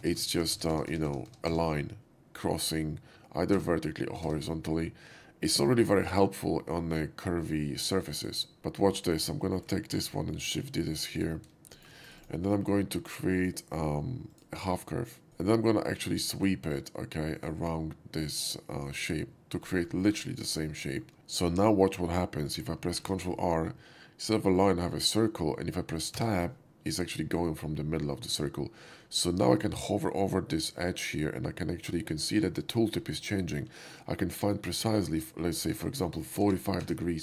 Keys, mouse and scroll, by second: 8.1 right click, 9.1 shift+click, 9.5 shift+middle click, 9.7 shift+d, 10.7-11.0 drag, 11.1 right click, 11.7 shift+middle drag, 11.9 shift+right click, 12.2 shift+click, 13.4 shift+click, 14.3 shift+click, 15.2 ctrl+z, 15.3 click, 16.4 click, 17.3 click, 18.9 click, 20.0 shift+middle click, 20.8 shift+middle click, 21.1 ctrl+z, 22.9 ctrl+r, 26.2 Tab, 35.0 click, 35.9 ctrl+z, 36.5 ctrl+r, 36.7 Tab.